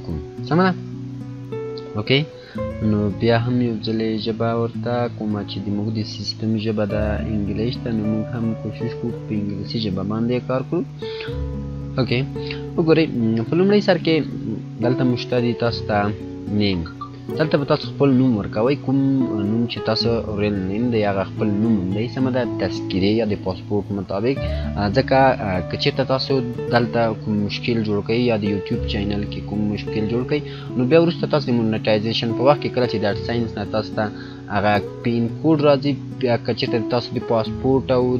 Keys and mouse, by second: 0.9-2.7 drag, 8.9 click, 13.2 click.